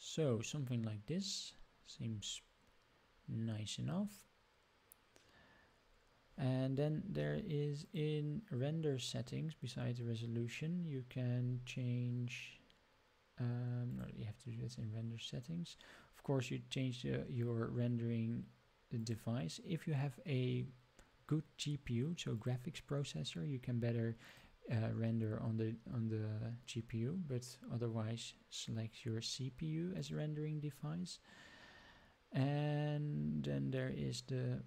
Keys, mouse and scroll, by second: 1.7-2.2 scroll down 4, 3.0 scroll up 1, 3.7 scroll up 1, 5.8 scroll up 1, 7.0-7.6 scroll up 3, 7.8 click, 11.3-13.8 scroll up 4, 13.8 click, 18.9-22.4 drag, 24.2-29.7 drag, 29.9 click.